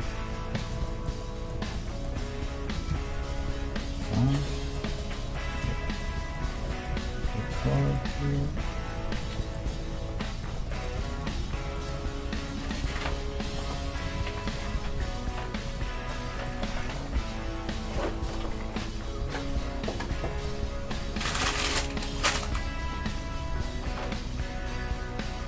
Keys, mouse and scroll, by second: 2.7 KP_2, 2.9 KP_1, 3.7 middle click, 5.7-8.1 right drag, 6.9 g, 8.1-13.5 middle drag, 9.7-11.5 right drag, 9.9 g, 10.9 g, 11.6-16.5 right drag, 11.9 g, 13.1 g, 14.1 g, 14.9 g, 15.9-20.2 middle drag, 19.2 KP_3, 20.9 a, 21.8 Tab, 22.1-23.9 right drag, 22.6 Tab, 23.1 Tab.